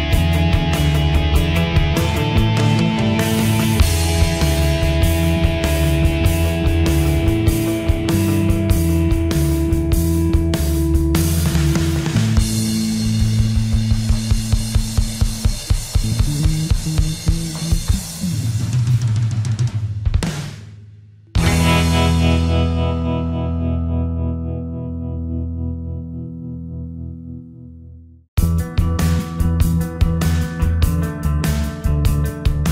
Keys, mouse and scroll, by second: 1.7-2.1 typing, 4.0 Escape, 4.6-23.3 drag, 23.3 ctrl+u, 23.9 Escape, 24.3 click, 25.0 Delete, 26.0 alt+click, 27.0 Delete, 28.8 click, 29.8 Delete.